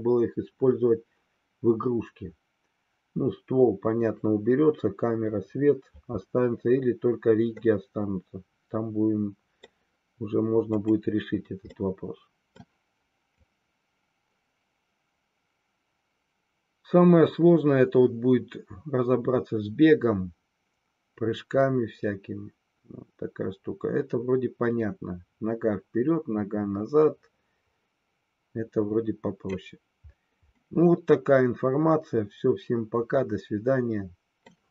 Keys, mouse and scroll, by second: 7.7-9.8 middle drag, 10.8 click, 11.8-12.6 middle drag, 13.4-29.7 drag, 30.7-34.6 middle drag.